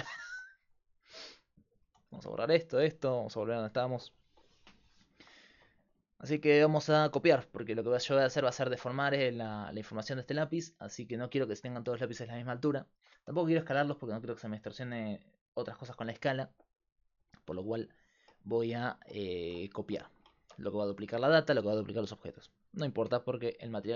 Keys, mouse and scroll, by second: 1.2 x, 1.9 x, 3.3 alt+g, 3.9 click.